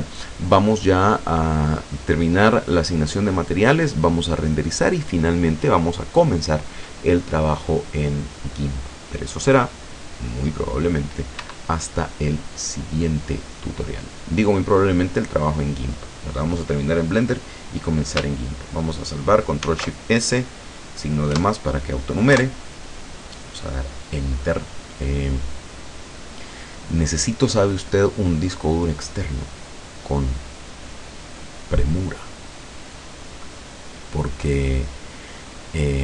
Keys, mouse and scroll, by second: 11.5 Escape, 12.9 click, 19.7 ctrl+shift+s, 21.4 KP_Add, 22.4 KP_Enter.